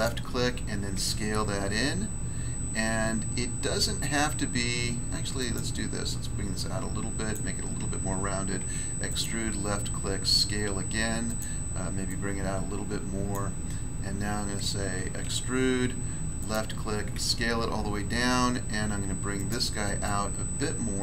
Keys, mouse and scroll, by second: 0.9 s, 5.4 click, 6.5 click, 7.3 click, 8.6 e, 10.1 s, 11.2 click, 12.0 click, 13.3 click, 13.8 scroll down 1, 15.2 e, 16.4 click, 17.1 s, 19.3 click, 20.0 click.